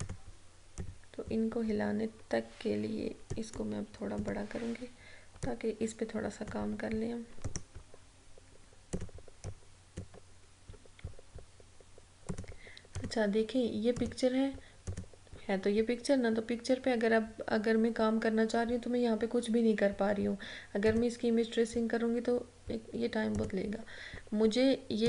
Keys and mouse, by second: 3.4-7.5 drag, 7.5 right click, 9.0-12.4 drag, 21.0 click, 23.4 click.